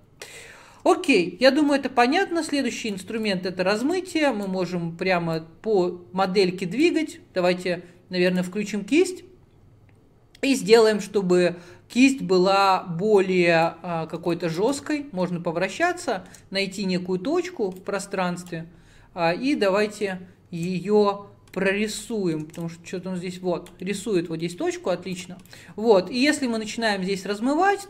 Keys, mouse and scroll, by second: 14.9-16.6 middle drag, 16.6-17.1 scroll down 4, 17.1-17.4 scroll up 8, 18.6 click, 19.4-21.2 middle drag, 21.2-22.1 scroll down 1, 22.1 click, 22.2 middle click, 22.7-23.9 drag, 23.9-25.3 middle drag, 25.3-27.8 drag.